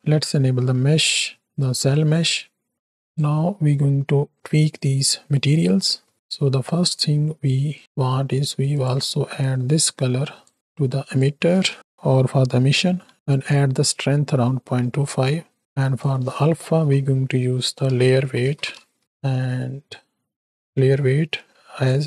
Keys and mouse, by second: 1.1 ctrl+alt+click, 1.9 click, 3.1-5.8 drag, 6.0 middle drag, 6.3 click, 6.8 middle click, 7.8 middle click, 8.7 click, 9.4-10.5 drag, 11.0-13.1 drag, 13.7 middle click, 15.8-19.1 drag, 19.9-20.4 drag, 20.7-21.8 drag.